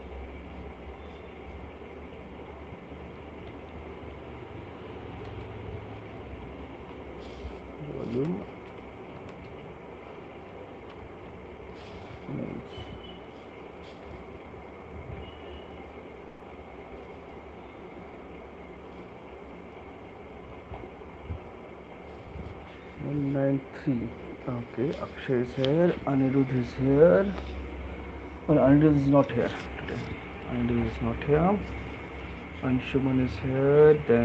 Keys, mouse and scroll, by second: 3.2-4.2 typing, 5.3-7.3 typing, 8.5-9.3 typing, 10.9-11.9 typing, 13.3 click, 13.9 ctrl+c, 15.0 middle click, 15.7 click, 18.9 click, 21.1 middle click, 21.7 click, 30.6 click.